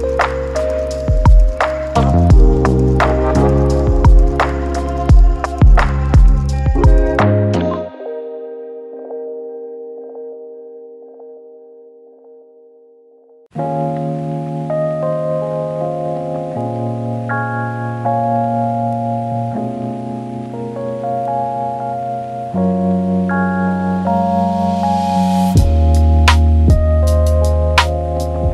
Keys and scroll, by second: 2.6 ctrl+z, 3.7 ctrl+z, 11.2-14.3 typing, 18.0 typing, 23.3-23.7 typing, 28.3 ctrl+d.